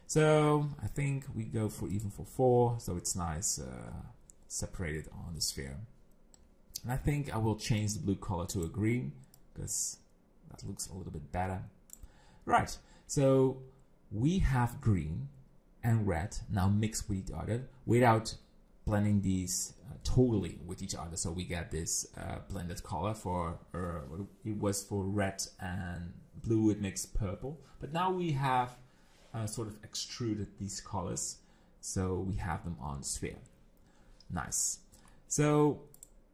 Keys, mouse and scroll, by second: 0.9 click, 7.8 click, 8.5 click, 34.7-35.1 scroll down 5, 35.1 middle click, 36.0 click.